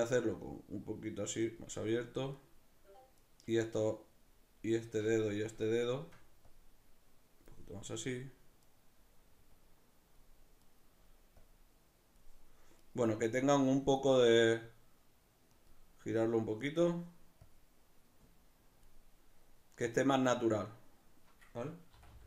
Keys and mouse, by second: 2.4 right click, 3.2 right click, 5.7 shift+right click, 6.4-8.7 drag, 8.7 right click, 9.6-10.7 drag, 10.7 right click, 11.4-12.9 drag, 12.9 right click, 13.4-15.6 drag, 15.6 right click, 16.7 right click, 17.4-20.0 drag, 20.0 right click, 21.9 r.